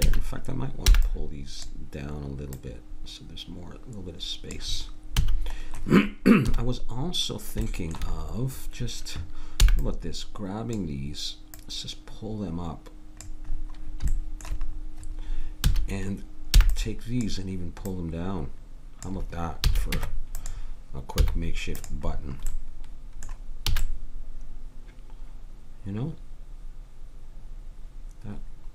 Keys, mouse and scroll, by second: 0.0 a, 0.9 b, 2.5-4.2 drag, 5.2 a, 6.4 KP_3, 9.7 b, 11.5-13.5 drag, 13.5-15.5 middle drag, 15.7 a, 16.6 b, 17.9 click, 19.6 a, 19.9 Tab, 21.2 z, 23.7 a.